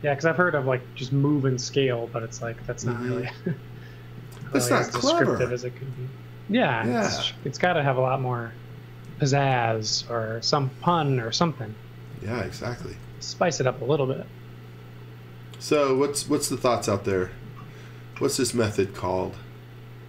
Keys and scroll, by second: 2.3 m, 7.0 s, 9.1 z, 9.9 s, 11.9-13.5 typing, 16.0 x, 16.3 v, 16.7 space, 18.2 s.